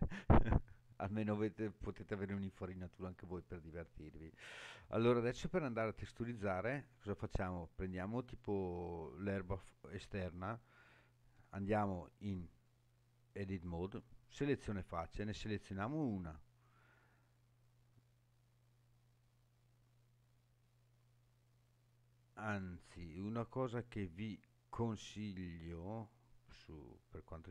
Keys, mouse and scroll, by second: 2.4-3.4 scroll up 3, 3.4 scroll down 1, 4.1 scroll down 1, 4.2-4.8 shift+middle drag, 5.6 scroll down 3, 7.2 click, 9.3-9.6 scroll down 2, 10.3 scroll up 2, 11.7 Tab, 21.5 click, 24.2-24.9 scroll down 3.